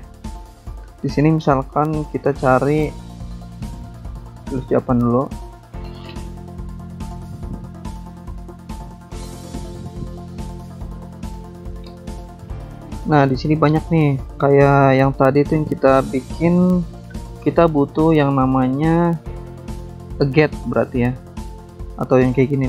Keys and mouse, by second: 0.1 click, 1.5 alt+Tab, 2.6 alt+Tab, 3.4 alt+click, 4.2 click, 5.1 click, 6.7 click, 8.3 click, 9.0 typing, 9.2 Return, 14.6 click, 21.1 alt+Tab, 22.1 alt+Tab, 22.3 alt+Tab.